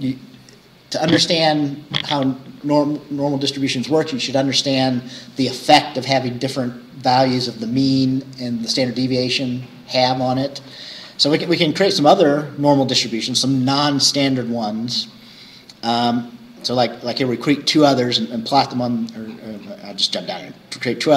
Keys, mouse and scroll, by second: 16.0 scroll down 2, 18.2-19.0 scroll down 2, 19.0-19.3 scroll up 2, 19.3-19.6 scroll down 2.